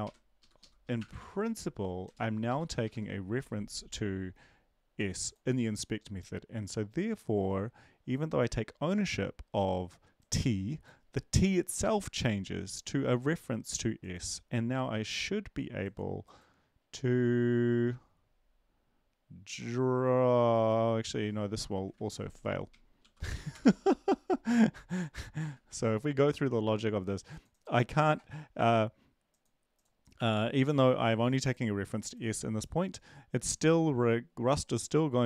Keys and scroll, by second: 0.0 ctrl+shift+Right, 0.4 shift+Left, 0.6 shift+Left, 1.0 BackSpace, 1.2 c, 2.8 Down, 2.8 Right, 23.0 ctrl+l, 23.3 Up, 23.5 Return, 25.6 ctrl+`.